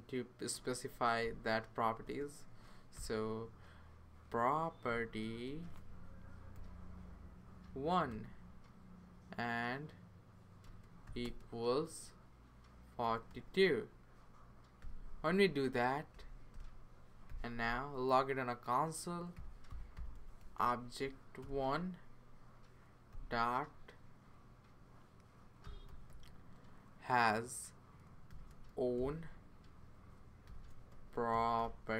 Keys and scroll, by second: 0.6-2.9 typing, 4.6-7.0 typing, 8.2 1, 10.6-11.2 typing, 12.4-13.8 typing, 14.8 ;, 16.1 Return, 16.5 Return, 17.3 typing, 17.6 Return, 19.1-21.1 typing, 21.4 Return, 23.1 ., 25.4-26.6 typing, 28.0-28.9 typing, 30.2-31.9 typing.